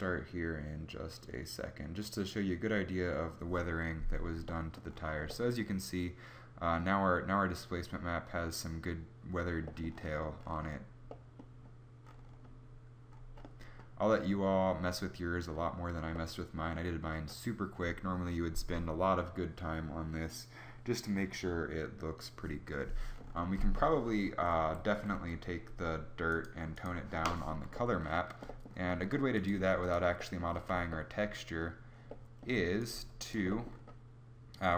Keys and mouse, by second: 24.6 Escape, 29.0 g, 32.4 g, 32.8 click.